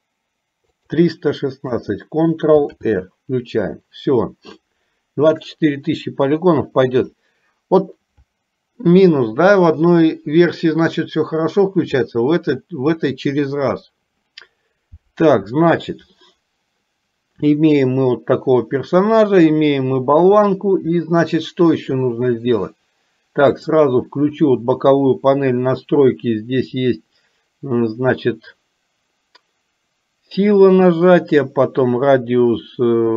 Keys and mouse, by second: 2.9 ctrl+r, 23.6 click.